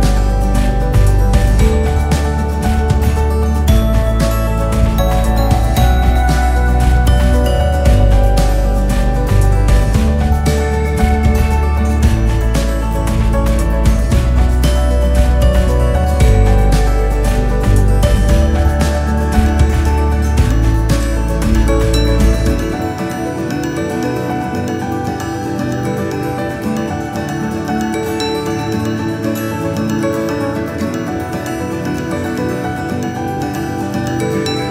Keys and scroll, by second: 2.2 ctrl+[.